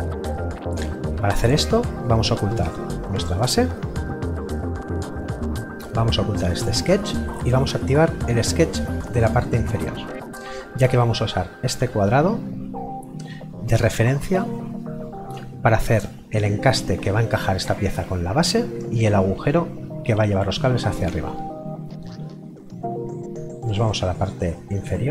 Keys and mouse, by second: 3.4 click, 4.5 middle click, 6.6 click, 24.2 click.